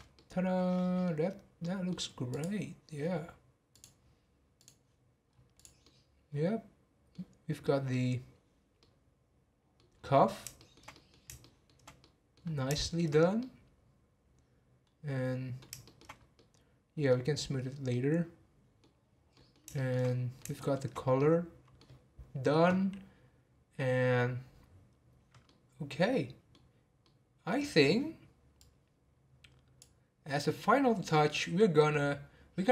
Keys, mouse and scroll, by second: 0.1-1.2 middle drag, 1.2-1.6 scroll down 2, 1.6-2.3 middle drag, 2.3 click, 2.6-3.0 scroll down 3, 3.7 drag, 5.0 click, 5.3 scroll up 1, 5.6 click, 5.8-7.3 middle drag, 7.3-7.6 scroll up 1, 7.6-9.9 middle drag, 9.9-10.6 scroll down 4, 10.6-12.4 shift+middle drag, 12.4 scroll up 1, 12.8 shift+middle drag, 13.1 scroll up 1, 13.4-16.1 middle drag, 16.1 scroll up 1, 16.3-17.1 middle drag, 17.1-17.9 scroll down 2, 17.9-18.9 middle drag, 18.9-19.3 scroll down 1, 19.3-20.9 middle drag, 20.9 scroll up 4, 21.2-24.2 middle drag, 25.4-29.0 middle drag, 29.0-31.7 drag.